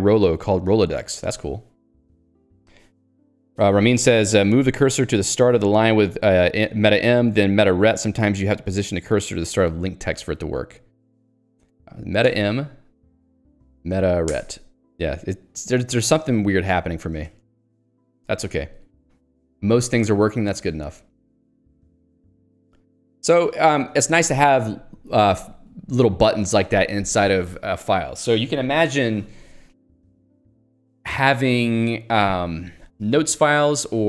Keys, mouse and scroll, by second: 11.4 click, 12.3 alt+m, 13.2 Escape, 14.4 alt+Return, 16.7 Escape, 17.3 ctrl+g, 17.6 Escape, 19.0 k, 21.4 j.